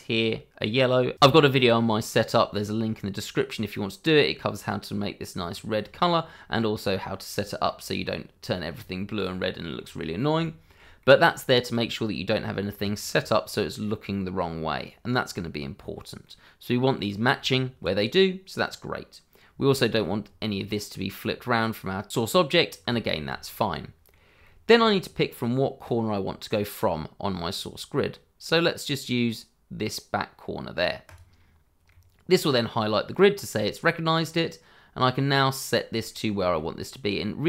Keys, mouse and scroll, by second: 3.7 middle click, 5.5 shift+middle click, 5.9-6.2 scroll up 1, 6.2 middle click, 7.4 scroll down 1, 7.6 middle click, 8.4 shift+middle click, 8.8 scroll up 1, 9.3 shift+middle click, 10.4 shift+middle click, 11.0 middle click, 12.8 shift+middle click, 16.2 middle click, 17.3 shift+middle click, 18.1 middle click, 19.7 shift+middle click, 20.0-21.0 scroll up 1, 22.4-22.8 scroll down 1, 22.9 shift+middle click, 23.4 middle click, 24.4 shift+middle click, 31.0 click, 31.9 middle click, 33.1 shift+middle click, 33.8 middle click, 36.0 shift+middle click.